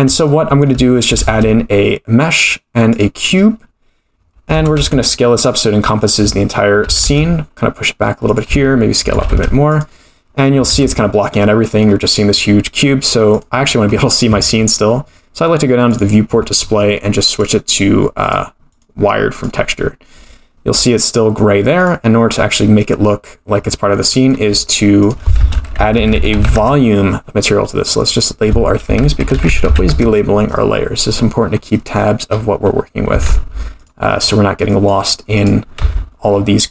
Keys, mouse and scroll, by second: 0.2 scroll up 1, 0.3 middle click, 1.2 shift+a, 4.2 scroll down 4, 4.5 Tab, 4.8 s, 6.3 middle click, 6.8 g, 8.5 s, 9.1 g, 10.7 Tab, 11.3 middle click, 13.3 click, 13.6-14.2 scroll down 6, 14.4-15.0 scroll down 4, 15.0-15.9 scroll down 7, 15.9 click, 16.2-17.3 scroll down 4, 17.3-18.3 drag, 18.7-19.4 drag, 21.7-22.5 drag, 23.5-24.3 scroll down 7, 24.0 middle click, 25.0-27.0 shift+drag, 27.9 click, 28.1-30.6 drag, 31.1-32.0 scroll down 14, 31.8 middle click, 32.3-32.7 scroll up 4, 32.7 scroll down 1, 32.7-33.1 scroll down 1, 33.1 g, 34.2-34.9 scroll up 3, 34.7 middle click, 35.3 click, 35.8 x, 36.3-36.7 scroll up 2.